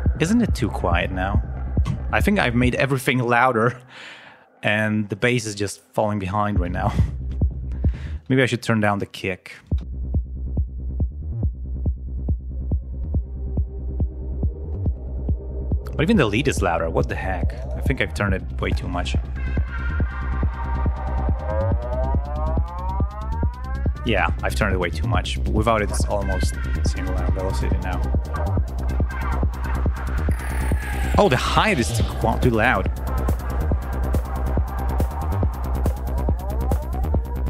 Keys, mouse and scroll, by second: 1.8-2.3 scroll up 2, 2.5 space, 5.2 scroll down 2, 6.4 space, 7.6-8.0 scroll up 2, 8.0 space, 8.9 click, 9.6 space, 11.8-12.7 scroll down 4, 17.4 click, 18.5-21.4 drag, 22.1 click, 22.5 click, 23.9 click, 25.7 click, 27.2 ctrl+scroll up 2, 30.1-30.4 scroll up 2, 30.8 scroll down 2, 32.0 scroll up 2, 33.2 click, 34.5-36.0 drag, 36.4 click.